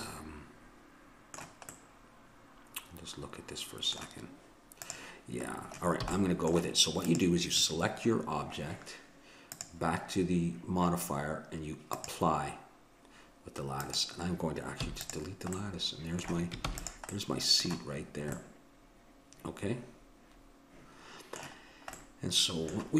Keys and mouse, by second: 0.1 middle click, 4.8-6.6 drag, 6.1 a, 7.0-8.9 drag, 9.5-11.4 drag, 12.0-13.7 drag, 13.8-15.6 drag, 14.8 x, 16.7 ctrl+s, 21.7-22.9 middle drag.